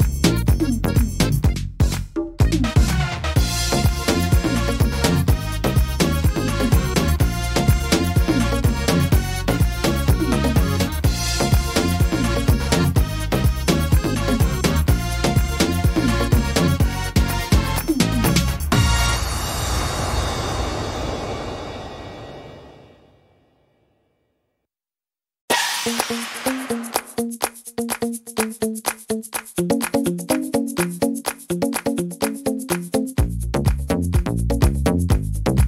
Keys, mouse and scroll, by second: 1.3 middle click, 2.4 right click, 3.1 shift+right click, 3.8 click, 5.0 middle click, 6.3 right click, 6.8 shift+right click, 7.8 click, 9.0 middle click, 9.4 scroll down 3, 9.8 middle click, 11.3 scroll up 3, 11.7 middle click, 13.8 ctrl+r, 15.1 ctrl+r, 15.9 middle click, 16.5 right click, 17.0 shift+right click, 17.5 right click, 17.8 shift+right click, 18.8 click, 19.7 click, 22.0 ctrl+z, 28.0 middle click, 31.5 click, 32.1 middle click, 33.5 click, 34.0 click.